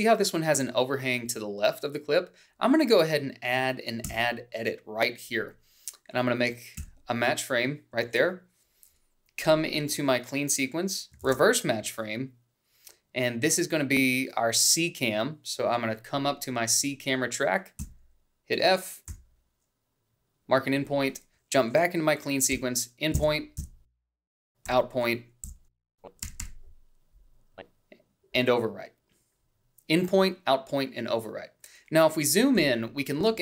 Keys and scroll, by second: 5.9 g, 8.6 f, 13.0 ctrl+shift+f, 19.6 f, 20.9 i, 24.4 i, 25.0 Down, 25.5 Left, 25.8 Down, 26.6 o, 27.4 b, 28.1 =.